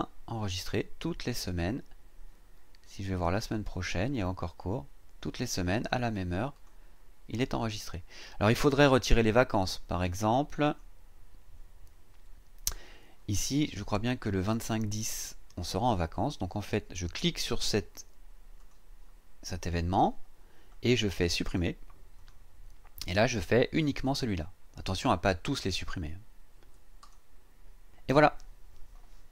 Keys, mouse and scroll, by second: 3.4 click, 4.6 click, 5.7 click, 6.5 click, 9.9 click, 10.6 click, 18.6 click, 22.1 click, 27.0 click.